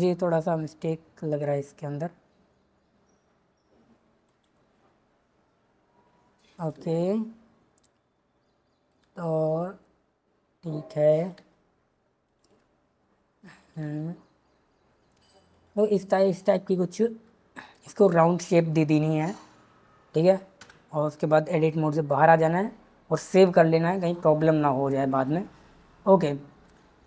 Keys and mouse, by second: 0.8 e, 4.5 e, 6.5 click, 6.7 e, 8.8 click, 9.0 e, 11.1 click, 11.3 e, 12.2 click, 12.4 e, 13.6 click, 13.8 e, 15.5 click, 15.8 e, 16.8 click, 20.6 Tab, 22.0 ctrl+s, 26.6 click.